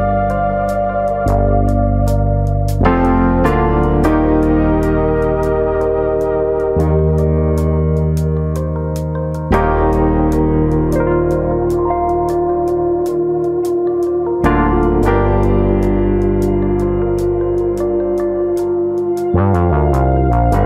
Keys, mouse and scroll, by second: 0.7 click, 4.2-5.0 scroll down 1, 5.0 f, 5.6 click, 6.0 scroll up 1, 6.2 middle click, 6.2-6.6 scroll down 1, 6.6 click, 7.3 middle click, 7.5 middle click, 8.2 click, 8.9 middle click, 9.2 middle click, 9.9 click, 10.3 middle click, 10.7 click, 11.2 click, 12.4 ctrl+z, 12.6-13.2 scroll up 2, 12.8 middle click, 13.2 click, 13.8 click, 14.3 click, 14.6 middle click, 16.1 click, 16.1 middle click, 16.6 click, 17.3-17.8 scroll down 3, 17.5 middle click, 17.8-18.5 scroll up 1, 18.7 click, 20.2 click.